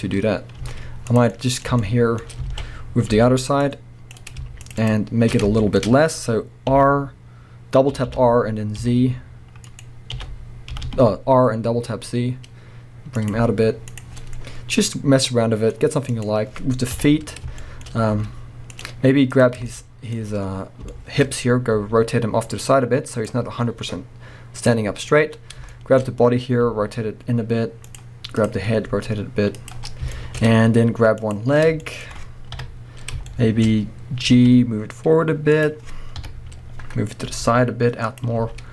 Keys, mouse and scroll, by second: 0.3-0.6 scroll up 1, 0.6-4.3 middle drag, 0.6 z, 2.5 alt+a, 3.6 c, 4.3 right click, 4.6 shift+click, 5.5-9.8 middle drag, 5.8-6.7 scroll up 3, 6.7 r, 9.8 right click, 10.1 r, 13.3 click, 13.4 z, 14.1 scroll down 1, 14.2-16.1 middle drag, 16.1 click, 16.9 KP_1, 17.6-18.8 shift+middle drag, 17.8 shift+scroll up 1, 18.1 z, 19.2 middle click, 19.3 click, 19.6 scroll up 1, 19.7-23.3 shift+middle drag, 20.4 scroll up 1, 21.8 r, 23.3 click, 23.5-23.8 scroll down 1, 24.6 click, 24.8 scroll up 1, 25.7-27.9 shift+middle drag, 26.6 r, 28.4 click, 28.8 r, 29.7 click, 29.9 scroll down 1, 30.1-31.2 shift+middle drag, 30.4-31.2 scroll up 1, 31.2 click, 31.8-35.7 shift+middle drag, 32.6 KP_3, 34.3 g, 35.7 click, 36.1 KP_1, 37.3 g, 38.2 click, 38.4 z.